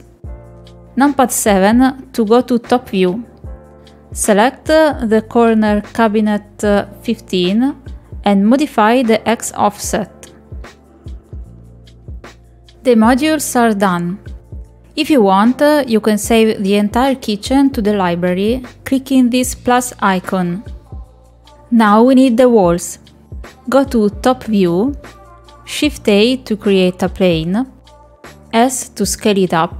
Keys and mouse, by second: 0.3 middle click, 2.5 middle click, 7.8 click, 11.5 click, 11.9 click, 12.3 click, 12.8 click, 13.2 click, 17.1 click, 21.2 middle click, 25.0 shift+a, 28.4 s.